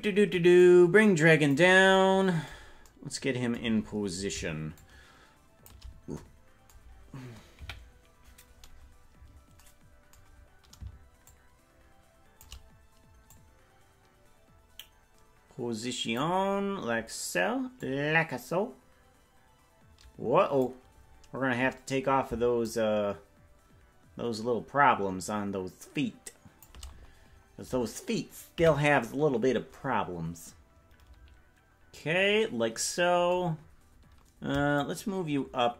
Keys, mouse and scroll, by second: 0.6-1.9 drag, 4.7-5.7 shift+drag, 7.5 KP_Decimal, 8.3 scroll down 3, 8.5-9.1 scroll up 2, 9.1-9.6 scroll up 3, 11.2-12.5 shift+drag, 13.2-16.2 drag, 17.8-20.7 drag, 22.6-26.7 shift+drag, 28.5 KP_Decimal, 34.7-35.7 shift+drag.